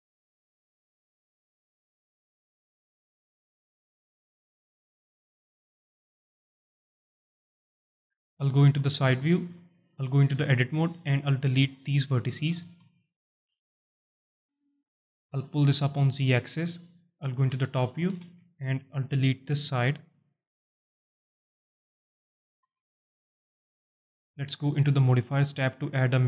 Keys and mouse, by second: 0.5 alt+shift+drag, 1.2-1.9 drag, 2.1-2.5 alt+drag, 3.1-3.6 drag, 4.1-4.5 alt+drag, 4.9-5.4 drag, 6.4-6.8 drag, 7.1 alt+drag, 8.3 KP_1, 9.9 z, 10.4 alt+shift+drag, 10.9 Tab, 12.5-13.5 drag, 13.9 x, 14.5 z, 15.1 alt+click, 15.7 Tab, 16.6-17.5 drag, 17.8 alt+drag, 18.5 KP_7, 19.0 Tab, 19.3 z, 20.3 alt+shift+click, 21.0-23.2 drag, 23.7 x, 24.4 z, 24.9 click.